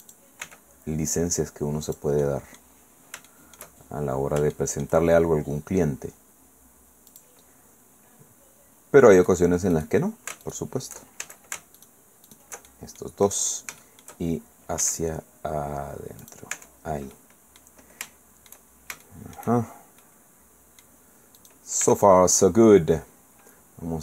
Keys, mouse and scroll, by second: 0.0 click, 0.4 e, 1.9 click, 2.5 click, 2.8 middle click, 3.3 shift+click, 3.8 shift+middle click, 4.5 shift+click, 7.1 click, 9.2 click, 9.7 click, 10.4 alt+shift+right click, 11.2 alt+shift+a, 11.8 alt+shift+right click, 12.7 alt+shift+click, 13.8 shift+click, 14.8 e, 16.2 click, 16.5 Tab, 17.1 middle click, 18.1 shift+click, 18.7 shift+middle click, 20.0-21.0 middle drag, 21.4 click, 21.8 Tab.